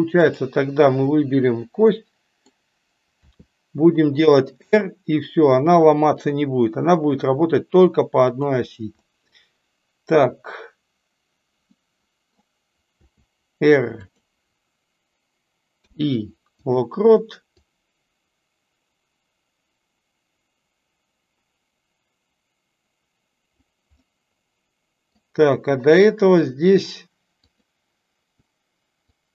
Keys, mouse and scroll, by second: 0.2 drag, 1.8-2.4 middle drag, 9.0 middle click, 11.7-12.3 middle drag, 17.7-23.5 drag, 23.9-25.0 middle drag, 25.9 drag, 27.4 click, 29.2-29.3 drag.